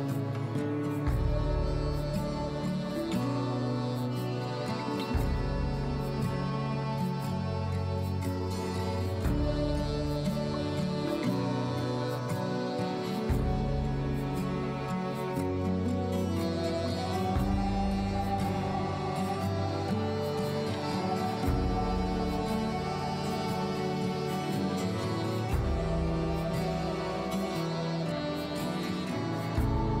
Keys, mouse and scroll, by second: 2.5 u, 6.3 scroll down 2, 7.4 scroll down 1, 8.5 s, 17.0 s, 23.3 middle click, 23.7-24.7 scroll up 9, 25.3 scroll up 4, 25.9 shift+middle click, 26.3 scroll up 1.